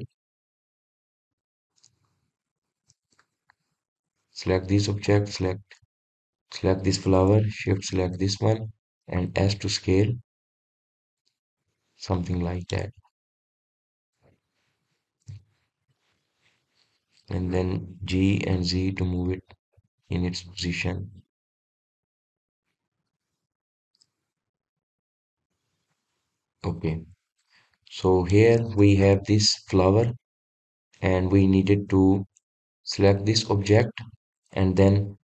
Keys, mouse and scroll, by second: 5.2 click, 6.1 shift+click, 7.4 click, 8.8 shift+click, 10.2 s, 13.2-14.1 middle drag, 14.1-15.4 scroll up 5, 15.4 drag, 16.5-17.2 shift+middle drag, 17.2-18.0 scroll up 3, 18.0 click, 19.1 g, 21.3 click, 21.7-22.6 middle drag, 22.6-23.5 scroll down 1, 24.0-26.8 middle drag, 26.8-27.4 scroll up 2, 27.4-27.9 scroll down 3, 27.9-30.1 middle drag, 30.1 KP_3, 30.6-31.4 scroll up 1, 31.4-34.1 middle drag, 34.1 click, 34.6-35.3 middle drag.